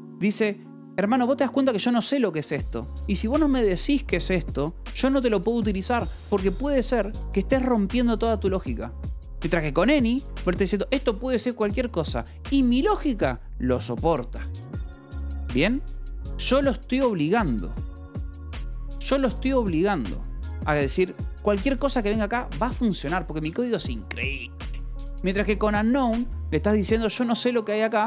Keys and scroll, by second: 15.7 Escape, 20.9 j, 22.1 ctrl+s, 25.5-28.0 typing.